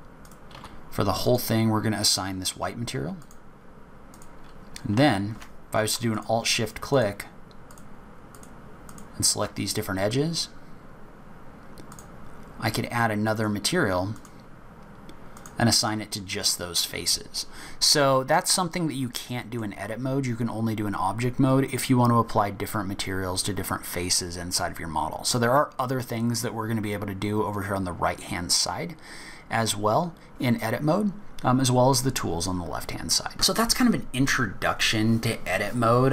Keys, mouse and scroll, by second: 0.5 a, 1.2 click, 3.2 click, 4.1 click, 6.1 alt+shift+click, 6.9 alt+shift+click, 7.7 alt+shift+click, 8.3 alt+shift+click, 8.8 alt+shift+click, 13.3 click, 15.3 click, 15.7 click, 16.3-17.8 scroll down 4, 17.8-18.5 scroll down 2, 18.5 scroll up 1, 19.0 middle click, 19.9 scroll down 2, 20.1-20.7 scroll up 4, 33.0 middle click.